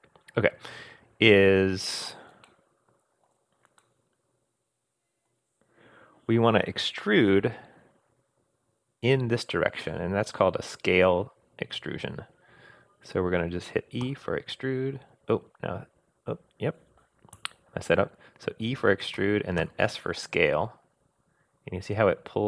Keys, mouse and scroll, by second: 2.4 shift+scroll down 1, 2.4 shift+middle click, 3.4 scroll up 1, 3.7 scroll down 1, 3.8-5.3 middle drag, 14.0 e, 19.2 e.